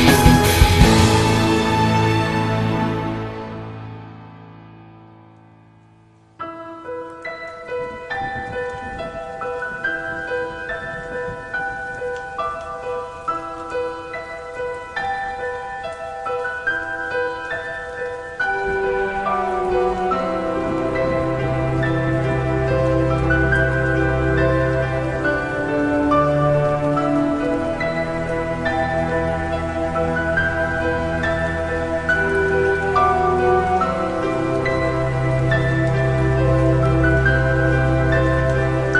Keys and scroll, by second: 0.3 i, 0.8 i, 1.9-5.7 typing, 6.7-8.6 typing, 9.9 i, 10.4 i, 11.1 i, 11.6 i, 13.5-16.1 typing, 18.0 i, 19.4 i, 19.7 i, 21.7-24.5 typing, 25.6 i, 26.0 i, 27.9 i, 28.9 i, 29.5 i, 30.7 i, 31.1 i, 32.1-34.5 typing, 35.9 i, 36.2 i, 36.6 i, 37.3 i, 38.7 i.